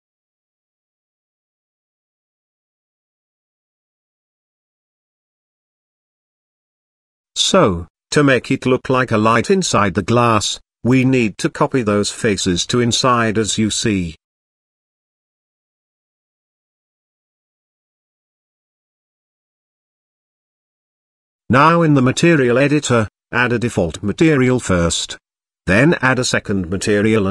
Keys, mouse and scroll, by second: 0.5 z, 1.7 middle click, 3.0 KP_3, 4.0 KP_1, 5.4-7.2 drag, 8.4-10.5 middle drag, 13.6 shift+d, 15.4 s, 20.2 Tab, 20.9 click, 21.5 click, 22.8 click, 24.7-27.3 drag.